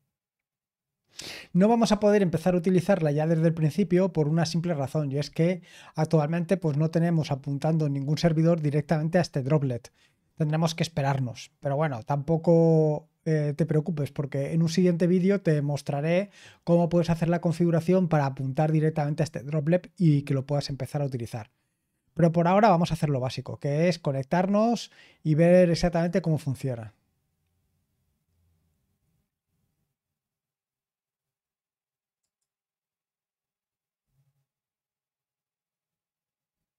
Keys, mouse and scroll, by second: 26.0 click, 29.6 scroll down 2, 30.6-32.1 scroll up 2, 32.1 click.